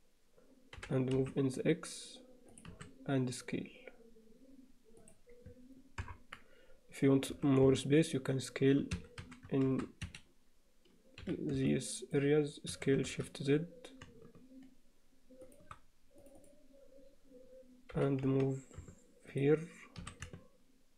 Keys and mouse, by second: 0.8 g, 2.7 s, 6.1 ctrl+KP_Add, 7.3 s, 9.3 s, 11.3 b, 12.7 s, 16.2 click, 17.9 g, 20.1 s.